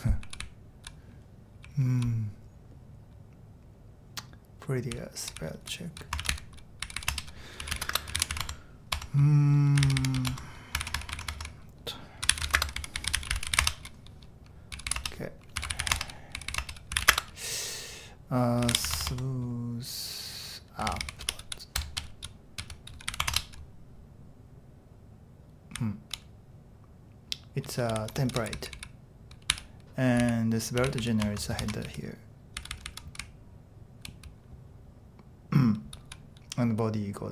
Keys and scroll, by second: 0.0-0.7 typing, 4.9-10.7 typing, 10.8 ctrl+w, 11.0 ctrl+w, 11.2 ctrl+w, 11.4 ctrl+w, 12.0-23.6 typing, 25.8-26.5 typing, 27.6-34.0 typing, 31.7 Escape, 35.9 typing.